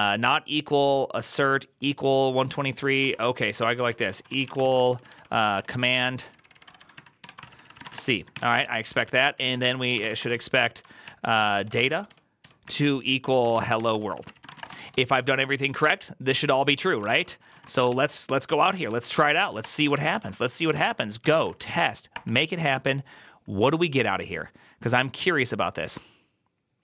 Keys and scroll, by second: 3.0 ctrl+c, 3.1-10.7 typing, 10.9 ctrl+n, 11.1 ctrl+p, 11.2 ctrl+p, 11.4 ctrl+y, 11.7 ctrl+c, 11.8-15.4 typing, 16.7-17.6 typing, 17.8 ctrl+c, 18.5 ctrl+a, 18.6-21.8 typing, 19.0 ctrl+c, 22.0 Return.